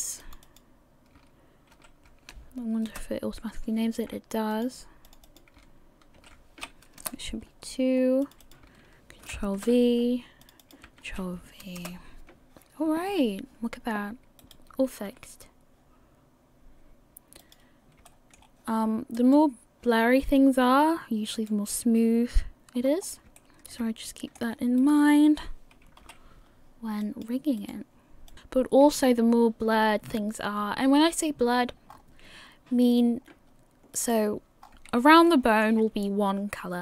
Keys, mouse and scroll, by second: 0.4 click, 4.5 click, 5.1 click, 5.2 click, 7.7-8.2 scroll down 1, 8.2 click, 8.2 scroll down 1, 8.4 click, 10.4 click, 10.6 click, 14.7 right click, 15.1 r, 18.1 shift+middle click, 18.4 scroll up 2, 19.5 right click, 21.6 right click, 22.8-23.4 scroll up 3, 23.4 shift+middle click, 23.4 click, 23.4 scroll down 4, 23.7 middle click, 25.1 right click, 26.0 KP_1, 27.0 click, 27.9 right click, 28.3 click, 29.3 click, 31.9 scroll up 4, 33.2 scroll down 3, 34.2 right click, 34.6 scroll up 3, 35.3 shift+middle click, 35.7 shift+scroll down 1.